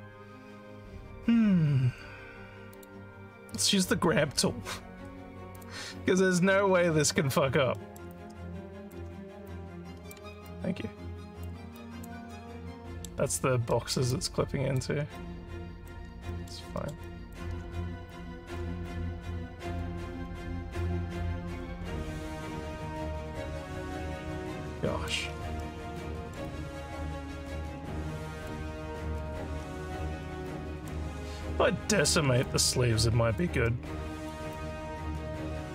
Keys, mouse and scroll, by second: 2.7 click, 5.5 click, 7.8 alt+middle click, 8.1 alt+click, 9.4 click, 10.4-11.5 alt+drag, 11.8 alt+click, 12.3 alt+middle click, 13.8 alt+middle click, 14.1 alt+click, 15.2 click, 16.3 alt+middle click, 16.8 alt+middle click, 17.1 alt+click, 18.1 click, 18.9 alt+click, 20.1 alt+middle click, 20.5 alt+scroll up 1, 20.8 alt+click, 22.0 click, 22.7 alt+click, 23.3 alt+scroll down 1, 23.6 alt+middle click, 24.0-25.1 alt+drag, 25.7 alt+middle click, 26.5-28.5 alt+drag, 28.8 alt+middle click, 29.6 scroll up 2, 30.1 alt+middle click, 30.5 alt+click, 32.5-33.5 alt+drag, 33.7 alt+middle click, 34.6-35.7 alt+drag.